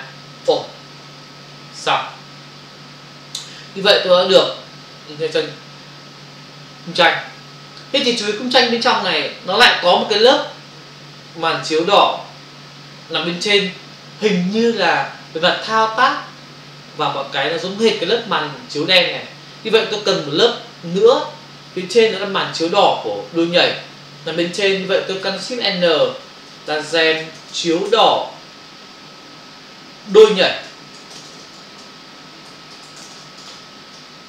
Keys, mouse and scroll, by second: 0.5 Return, 2.3 f, 24.8 click, 26.7-27.6 typing, 30.3-33.9 typing.